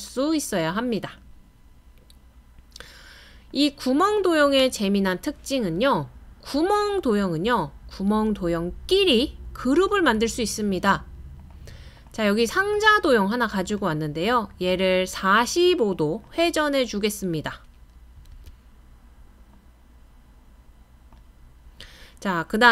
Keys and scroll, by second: 18.3 super+z.